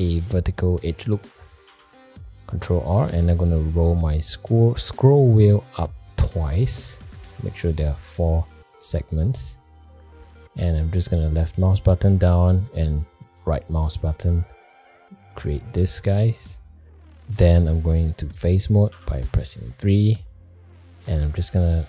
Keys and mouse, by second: 1.6 ctrl+r, 14.8 click, 18.9 3, 19.9 click.